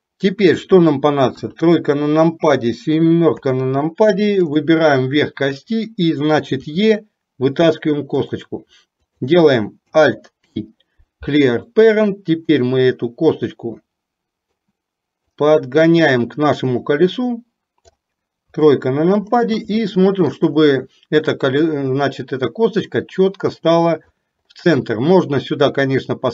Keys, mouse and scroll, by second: 1.4 KP_1, 3.4 KP_7, 4.6 click, 12.6-14.6 drag, 15.6-18.0 drag, 18.6 KP_3, 20.0 shift+middle click, 21.8 click, 22.0-24.3 drag, 25.9-26.3 drag.